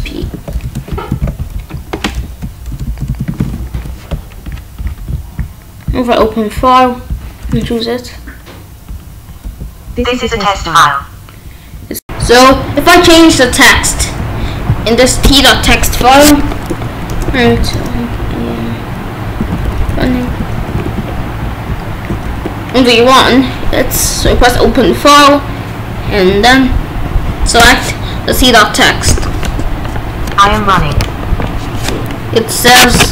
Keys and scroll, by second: 0.6 BackSpace, 1.1 ctrl+s, 2.3 Left, 2.7 BackSpace, 3.0 p, 3.3 ctrl+s, 7.4 Return, 13.5 Up, 16.8-18.0 typing, 19.4-20.6 typing, 20.8 ctrl+s, 22.2 ctrl+b, 29.0 Return.